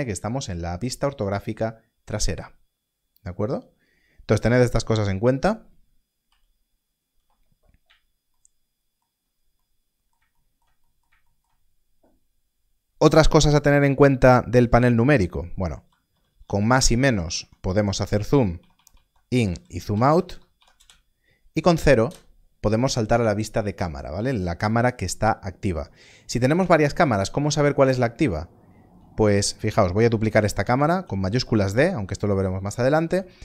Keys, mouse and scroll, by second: 6.2 KP_1, 15.8 KP_Add, 16.1 KP_Add, 16.2 KP_Add, 16.4 KP_Add, 16.9 KP_Subtract, 17.0 KP_Subtract, 17.2 KP_Subtract, 17.3 KP_Subtract, 17.6 KP_Add, 17.8 KP_Add, 17.9 KP_Add, 18.0 KP_Add, 18.4 KP_Subtract, 18.5 KP_Subtract, 18.7 KP_Subtract, 18.8 KP_Subtract, 19.0 KP_Subtract, 19.3 KP_Add, 19.5 KP_Add, 19.6 KP_Add, 19.9 KP_Subtract, 20.0 KP_Subtract, 20.3 KP_Add, 20.5 KP_Subtract, 20.7 KP_Add, 22.0 KP_0, 25.8 KP_0, 28.0-29.3 scroll up 1, 30.6 shift+d, 31.4 click.